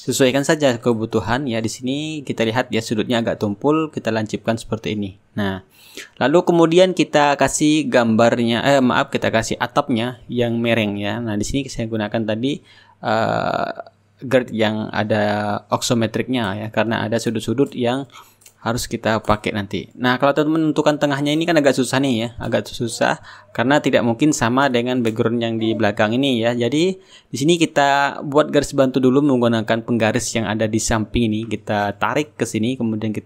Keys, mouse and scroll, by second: 1.3-3.5 right drag, 4.9 click, 6.4-9.4 shift+right drag, 8.4-9.4 middle drag, 10.3 click, 12.1 click, 20.1 click, 23.9 ctrl+z, 28.2 ctrl+z, 29.2-31.7 drag, 32.2-33.2 drag.